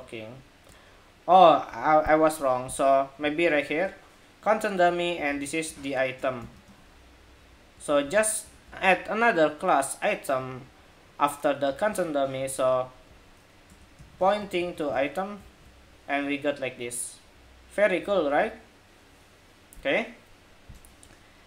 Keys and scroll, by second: 7.6 super+c, 7.8 super+c, 8.3 super+s, 14.3 super+s, 14.6 super+Tab, 15.2 super+r.